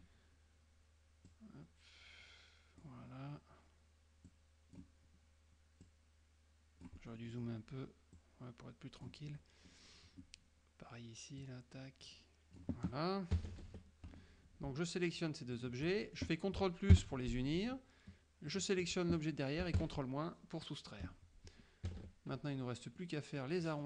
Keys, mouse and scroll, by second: 1.4-3.1 drag, 4.4 click, 5.9-7.7 drag, 7.1 middle click, 8.2 click, 9.4 middle click, 11.5-12.8 drag, 13.4 KP_Subtract, 15.7 shift+click, 16.0 shift+middle click, 17.0 ctrl+KP_Add, 18.6 shift+click, 19.9 ctrl+KP_Subtract, 21.9 KP_Subtract, 23.1 middle click.